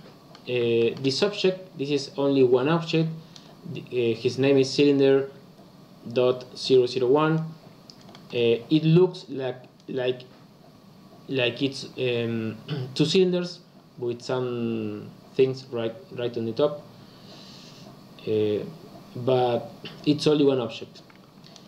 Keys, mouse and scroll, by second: 8.1-11.1 shift+middle drag.